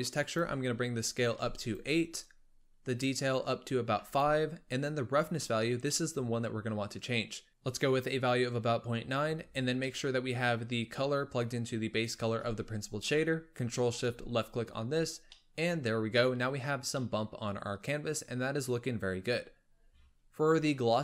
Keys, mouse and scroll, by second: 1.7 click, 2.8-4.2 drag, 5.6 scroll up 2, 5.8-7.2 middle drag, 7.2 click, 7.5-9.5 scroll up 2, 9.5-9.8 scroll down 1, 9.8-10.8 middle drag, 10.8-13.7 drag, 15.3-19.6 middle drag, 19.6-20.3 scroll up 1, 20.3-21.0 scroll up 3.